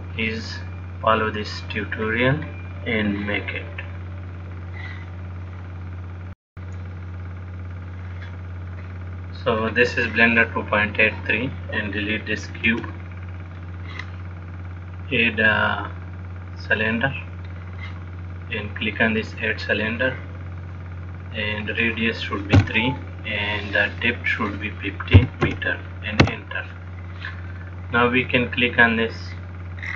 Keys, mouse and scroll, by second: 0.5-1.1 scroll down 4, 2.3-4.6 scroll down 3, 4.7 click, 11.2 click, 13.0 x, 15.0 click, 19.9 click, 21.9 click, 24.5 click, 27.9 click, 29.0 click.